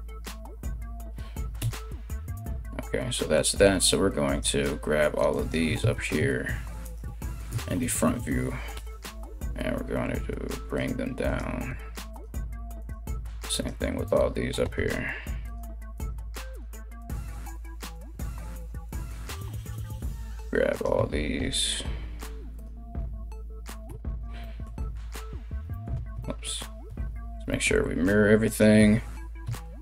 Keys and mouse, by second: 1.2 KP_1, 3.9 right click, 4.9 ctrl+right click, 5.5 ctrl+z, 6.4 ctrl+right click, 7.1 KP_3, 8.3 g, 10.9 right click, 11.3 g, 12.4 right click, 13.1 right click, 14.2 g, 15.5 right click, 15.7 g, 16.6 right click, 16.8 g, 17.5 right click, 17.6-29.8 middle drag, 17.7 g, 18.5 right click, 18.6 g, 19.3 right click, 20.3 right click, 21.0 g, 23.5 3, 24.5 alt+x, 25.5 ctrl+z, 26.6 alt+x, 28.0 right click, 29.5 ctrl+right click.